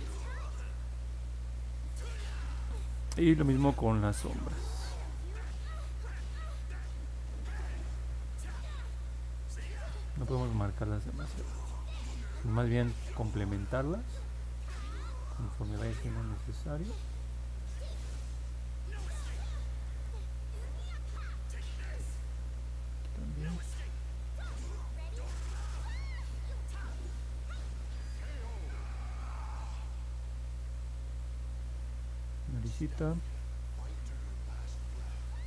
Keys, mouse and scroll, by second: 0.0 click, 0.3 click, 0.6 click, 1.4 click, 6.2 click, 9.0 click, 10.0 click, 10.7 click, 11.3 click, 11.8 click, 12.3 click, 13.0 click, 13.3 click, 14.3 click, 16.3 click, 16.7 click, 17.1 click, 17.6 click, 18.2 click, 18.5 click, 20.5 click, 21.0 click, 21.4 click, 21.7 click, 23.6 click, 24.3 click, 24.9 click, 27.3 click, 27.8 click, 28.1 click, 28.4 click, 28.7 click, 29.1 click, 29.5 click, 29.8 click, 30.1 click, 30.5 click, 31.0 click, 34.4 click, 34.8 click, 35.2 click.